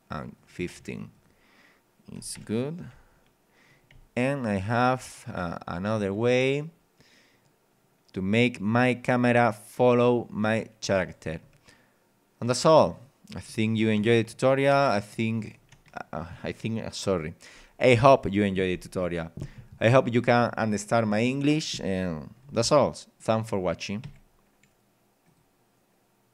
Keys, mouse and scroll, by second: 0.4 click, 0.6 KP_1, 0.7 KP_5, 1.1 click, 2.2 click, 2.4 p, 3.0 w, 4.0 d, 11.0 a, 14.0 w, 14.4 a, 24.0 Escape, 25.2 click.